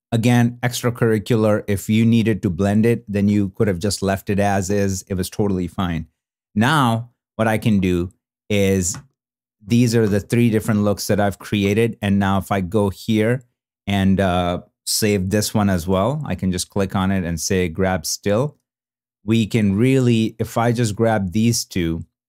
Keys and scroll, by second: 7.7 super+b, 9.6 super+n, 10.8 super+b, 11.4 super+n.